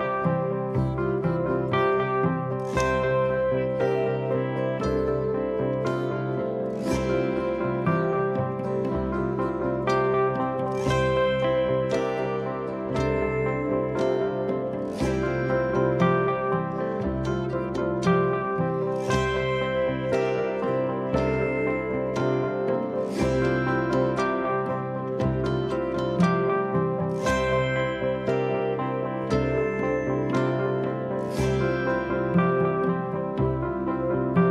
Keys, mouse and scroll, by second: 1.1 middle click, 2.2-3.2 middle drag, 7.0 click, 13.0 click, 16.8-18.1 drag, 21.3 click, 24.2-25.6 drag, 26.1 ctrl+c, 28.7-30.0 drag, 30.3 ctrl+a, 31.6 ctrl+v.